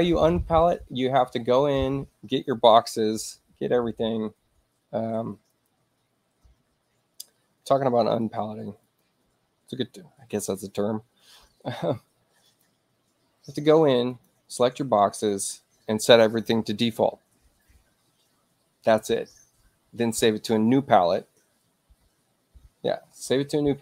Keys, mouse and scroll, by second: 0.6-1.2 scroll down 2, 1.5 scroll down 2, 2.3-2.8 scroll down 2, 3.3 space, 5.5 click, 8.9 click, 12.4 click, 13.5 space, 14.1 click.